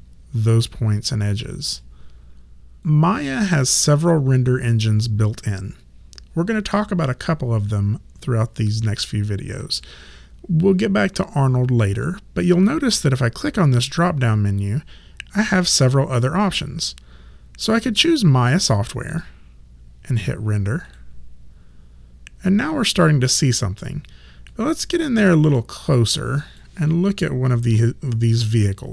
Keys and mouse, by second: 1.8 click, 13.8 click, 19.1 click, 24.5 click, 27.8 alt+right click.